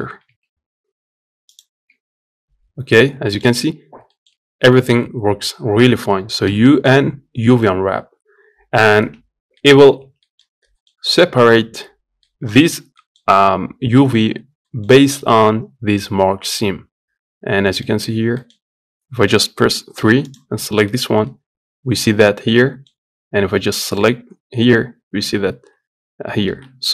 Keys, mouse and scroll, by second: 9.4 middle click, 9.7 Tab, 9.9 middle click, 10.2-10.5 scroll up 1, 10.5-12.4 shift+middle drag, 12.4 scroll down 1, 12.7-13.9 middle drag, 13.9-14.4 scroll up 2, 14.4-16.9 middle drag, 16.9-17.5 scroll down 1, 17.5 middle click, 18.5-19.1 scroll up 1, 19.7 3, 22.0 scroll down 2, 22.3-23.7 middle drag, 23.7 click.